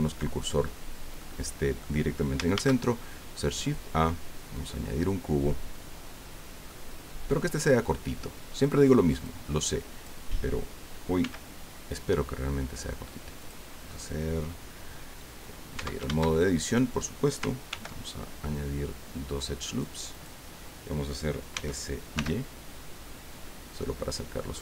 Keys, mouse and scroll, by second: 0.8 scroll down 2, 1.2 click, 2.5 shift+a, 4.5 click, 6.7 click, 7.8 click, 9.2-10.2 drag, 11.2 s, 13.4 click, 15.7 Tab, 16.5 shift+scroll up 3, 17.7 ctrl+r, 18.9 scroll up 2, 19.6 click, 20.1 click, 21.5 s.